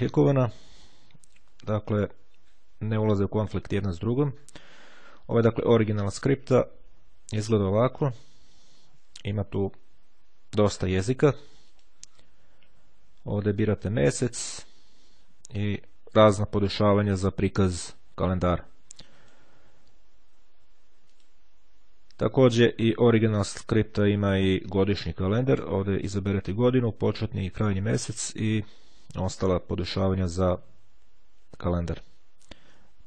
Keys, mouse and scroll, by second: 5.6 click, 8.0 click, 11.8 click, 13.3 click, 14.1-15.1 drag, 19.1 click, 21.2 click, 24.8 click.